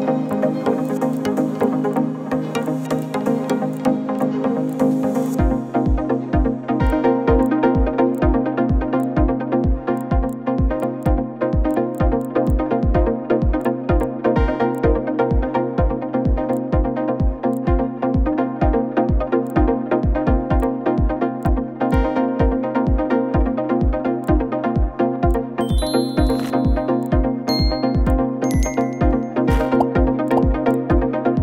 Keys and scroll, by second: 5.7 ctrl+scroll, 6.0 ctrl+-, 6.1 ctrl+-, 6.2 ctrl+-.